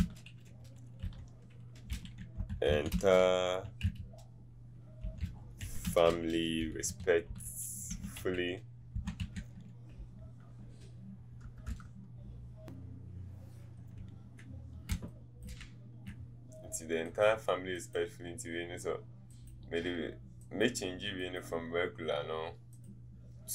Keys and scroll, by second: 1.0 e, 8.9-9.9 typing, 11.4 BackSpace, 12.6 Up, 12.6 Right.